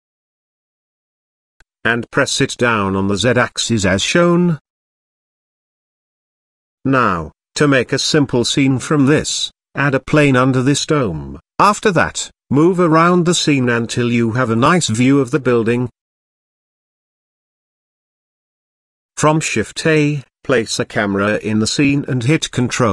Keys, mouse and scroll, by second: 0.4 click, 0.9-1.8 scroll down 7, 1.8-2.3 scroll down 2, 2.3 s, 2.6 z, 4.8 click, 5.9 click, 6.8-7.2 scroll down 3, 7.4 shift+a, 9.0 s, 9.7 KP_1, 9.9 KP_0, 10.5 click, 10.8 s, 11.2 click, 12.0 s, 12.3 click, 12.6-13.2 middle drag, 13.3-14.0 scroll up 3, 13.7 middle click, 14.2-15.0 shift+middle drag, 15.0 middle click, 15.9-16.4 scroll up 2, 16.6 scroll down 1, 17.1-18.9 middle drag, 19.0 shift+middle click, 20.1 shift+a.